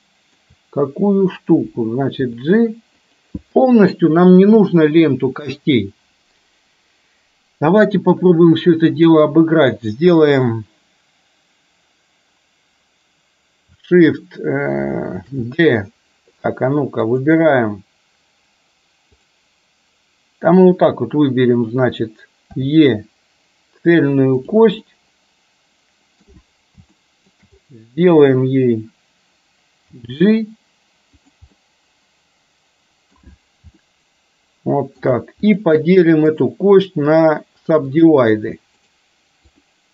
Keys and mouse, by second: 2.3 g, 15.2 shift+d, 17.2 click, 22.6 e, 24.9-26.3 middle drag, 27.1 shift+middle click, 30.1 g, 31.6-33.2 middle drag, 33.9-35.1 shift+middle drag, 35.4 click, 37.3 right click, 38.8-39.9 right drag.